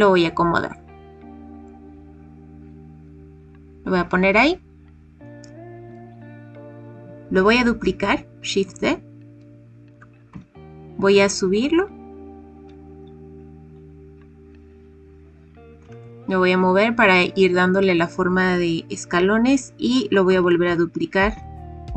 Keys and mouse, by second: 3.3 click, 8.6 shift+d, 9.8 g, 10.2 z, 13.6 click, 15.8 g, 16.0 y, 17.8 click, 20.2 shift+d, 20.6 g, 21.3 z.